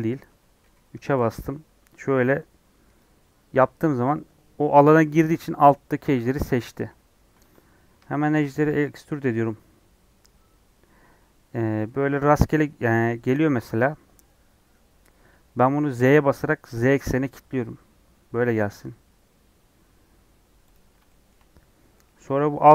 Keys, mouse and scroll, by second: 0.6 KP_3, 2.9 click, 3.5-6.5 middle drag, 6.5 KP_3, 6.9 scroll down 1, 7.2 scroll up 1, 8.0 shift+middle click, 8.6 e, 21.0-22.7 shift+middle drag.